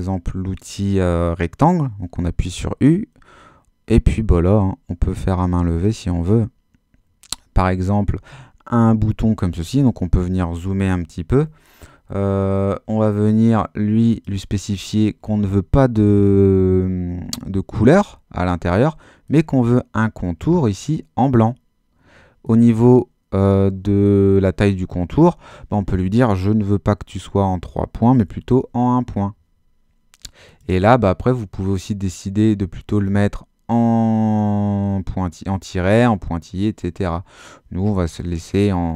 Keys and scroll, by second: 28.2 i.